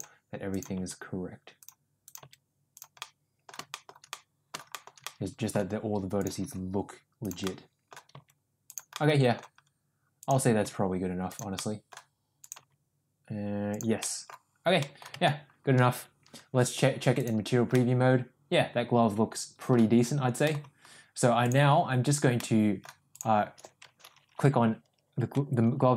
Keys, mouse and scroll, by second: 0.6 click, 0.8 g, 2.1 click, 2.3 g, 3.0 middle click, 3.7 middle click, 4.1 middle click, 4.7 middle click, 5.1 middle click, 6.5 g, 7.5 middle click, 8.2 g, 9.1 middle click, 10.3 click, 10.7 g, 11.6 middle click, 12.4 click, 12.7 g, 14.0 middle click, 14.9 middle click, 15.3 Tab, 17.2 click, 17.8-19.7 middle drag, 20.5 middle click, 21.5 click, 22.4-22.9 middle drag.